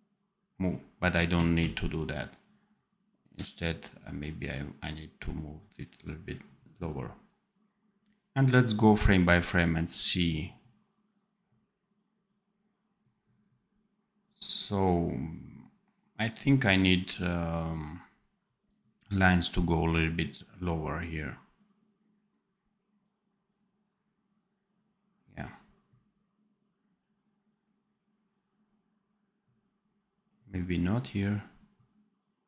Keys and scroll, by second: 1.5 ctrl+z.